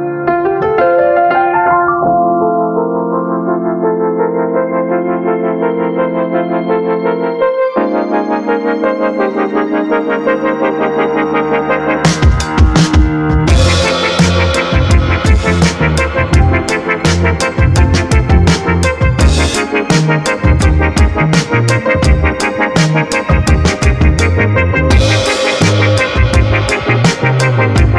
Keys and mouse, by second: 1.3 ctrl+s, 1.8 a, 1.9 a, 6.3 middle click, 7.1 middle click, 7.9 click, 10.0 ctrl+s, 10.3 a, 10.5 a, 12.4 click, 13.0 click, 13.5 click, 14.7 click, 15.9 click, 16.3 click, 18.0 click, 19.1-21.9 drag, 20.0 KP_0, 22.9 ctrl+s, 23.3 a, 23.4 a.